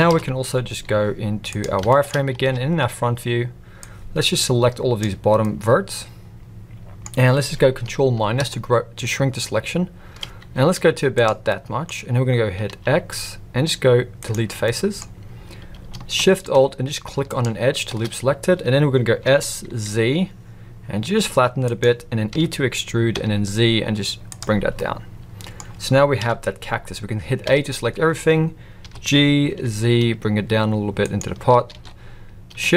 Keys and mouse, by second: 0.1 KP_1, 0.7 z, 1.9 shift+middle click, 2.4 alt+a, 3.8-5.0 drag, 5.4-7.0 middle drag, 8.3 ctrl+KP_Subtract, 10.7 z, 11.5 middle click, 12.7 x, 14.7 middle click, 19.2 s, 22.3 e, 24.8-25.6 middle drag, 26.2 KP_1, 27.4 a, 28.8 g, 31.7 alt+a.